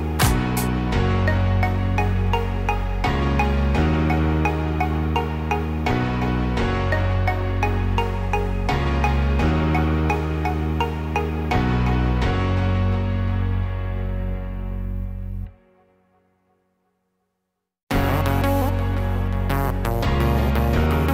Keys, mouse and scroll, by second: 0.3 middle click, 6.0 click, 8.4 click, 9.7 KP_0, 11.8 scroll down 2, 12.4-14.2 scroll down 8, 14.2-16.3 scroll down 1, 16.3 scroll down 1, 16.4 shift+middle click, 17.9 middle click.